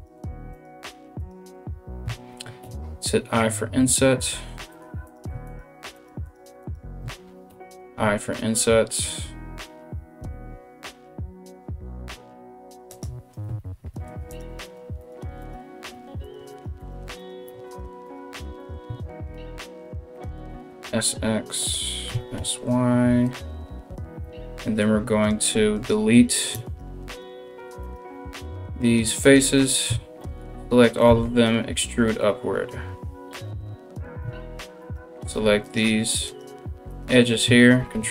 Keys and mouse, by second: 0.1 right click, 0.3-27.4 middle drag, 0.4 right click, 0.8 right click, 2.2 i, 4.7 right click, 5.1 right click, 5.6 ctrl+right click, 5.8 ctrl+right click, 6.2 ctrl+right click, 13.9 right click, 14.2 shift+right click, 14.6 shift+right click, 15.0 shift+right click, 15.8 right click, 16.1 shift+right click, 16.4 shift+right click, 16.8 shift+right click, 17.3 ctrl+right click, 17.7 ctrl+right click, 18.2 ctrl+right click, 20.1 i, 20.1 s, 21.7 s, 24.9 shift+right click, 25.4 shift+right click, 26.3 ctrl+right click, 26.7 ctrl+right click, 27.4 ctrl+right click, 27.6-35.9 ctrl+middle drag, 28.0 x, 29.5 a, 30.7 e, 33.8 2, 34.4 alt+right click, 35.2 alt+shift+right click, 35.9 right click, 36.0 middle click, 36.5 right click, 36.7-38.1 alt+shift+middle drag, 37.4 ctrl+b.